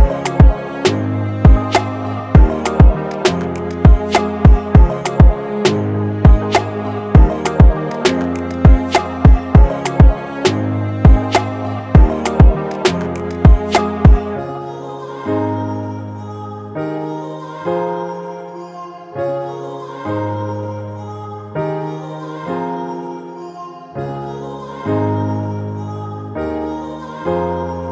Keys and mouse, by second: 1.6 alt+click, 4.7 click, 5.3 shift+click, 6.0 ctrl+c, 6.2 ctrl+f, 7.0-10.0 drag, 11.1 click, 12.9-16.1 drag, 16.1-18.2 drag, 20.3-22.1 drag, 22.1-26.2 drag.